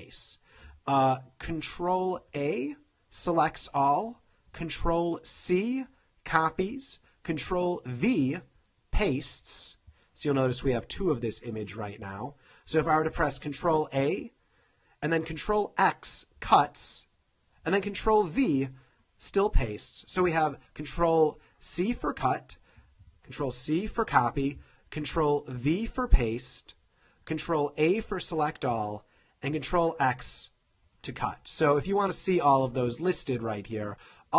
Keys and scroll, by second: 2.2 super+a, 5.4 super+c, 8.2 super+v, 13.6 super+a, 16.4 super+x, 18.3 super+v, 23.3 super+c, 25.6 super+v, 27.6 super+a, 29.5 super+x.